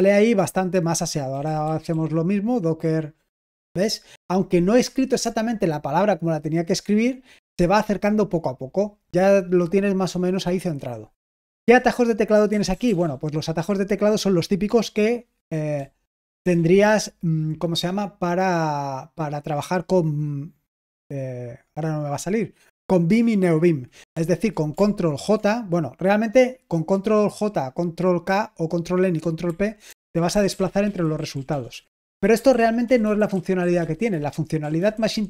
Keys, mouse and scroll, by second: 1.0-2.3 typing, 12.5 BackSpace, 12.7 BackSpace, 12.8 BackSpace, 12.9 BackSpace, 15.7 j, 29.9 ctrl+j, 30.1 ctrl+j, 30.3 ctrl+j, 30.4 ctrl+j, 30.6 ctrl+j, 30.8 ctrl+k, 31.0 ctrl+k, 31.7-32.0 ctrl+k, 32.2 c, 33.0 ctrl+j, 33.3 ctrl+j, 33.6 ctrl+k, 34.1 ctrl+k, 34.6 ctrl+j, 35.1 ctrl+j.